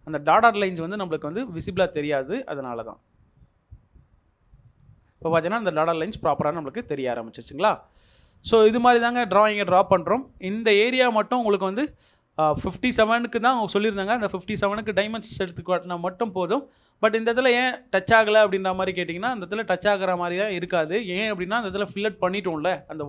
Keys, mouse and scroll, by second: 4.7 Escape, 4.8-5.2 scroll down 1, 5.2 middle click, 5.7-6.1 scroll up 1, 6.6-7.1 scroll down 1, 7.1 middle click, 7.6 scroll up 1, 12.1-13.2 scroll up 1, 13.2-13.6 scroll down 1, 13.6 middle click, 16.7-17.3 scroll up 1, 18.5-20.3 scroll down 1.